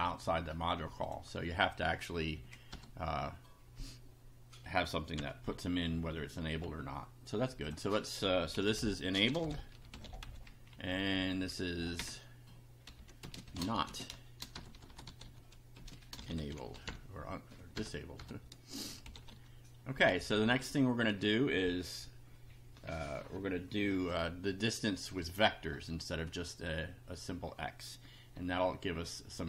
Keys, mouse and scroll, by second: 1.0 click, 2.3 Left, 2.7 BackSpace, 5.1 F5, 7.7 click, 8.5-10.7 typing, 12.0 Return, 12.9-19.8 typing, 20.3 Down.